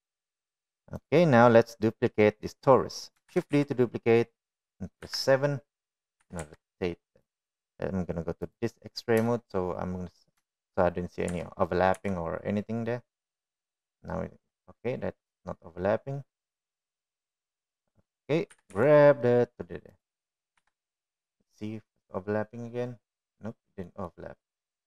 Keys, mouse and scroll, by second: 1.5 drag, 1.9 click, 2.8-3.1 middle drag, 4.2 shift+d, 5.9 KP_7, 7.1 r, 10.2 shift+middle drag, 11.4 shift+middle click, 12.2 r, 18.1-18.5 middle drag, 19.4 g, 21.5 KP_7, 24.1-24.8 middle drag.